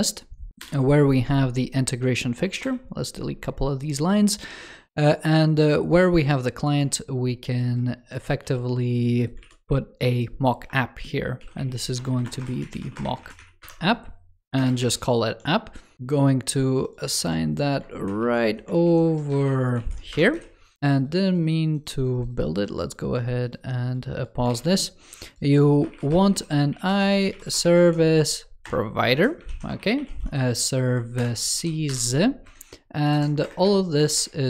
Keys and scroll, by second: 6.5 super+d, 8.3 super+c, 9.3 super+v, 17.0 super+c, 17.9 shift+super+Left, 18.1 super+v, 18.6 super+e, 19.2 shift+d, 19.6 super+v, 24.4 super+d, 29.4 ctrl+s, 33.0 shift+super+Right.